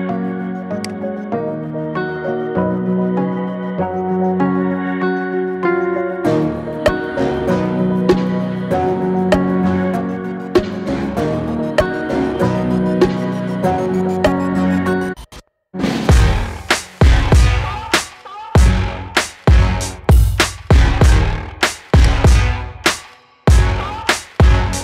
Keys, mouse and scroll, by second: 1.4 scroll up 4, 1.8-2.3 middle drag, 2.4 scroll up 1, 2.7-16.7 middle drag, 16.7 scroll up 1, 16.8-17.8 middle drag, 17.8-18.2 scroll down 4, 18.2-20.8 middle drag, 20.8-22.3 scroll down 9, 22.3-24.8 scroll down 1.